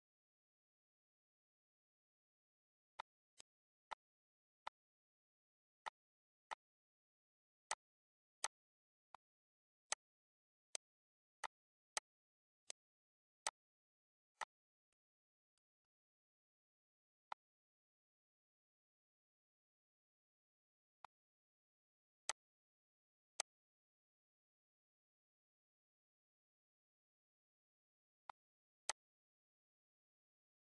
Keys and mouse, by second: 1.3 ctrl+d, 1.9 ctrl+d, 2.9 click, 3.8 shift+click, 4.6 click, 5.8 click, 6.4 click, 7.6 click, 8.3 shift+click, 9.0 click, 9.8 click, 10.6 click, 11.3 click, 11.8 shift+click, 12.6 click, 13.4 click, 14.3 click, 15.4 click, 17.2 click, 20.9 click, 22.2 click, 23.2 click, 23.6 ctrl+s, 28.2 click, 28.8 click.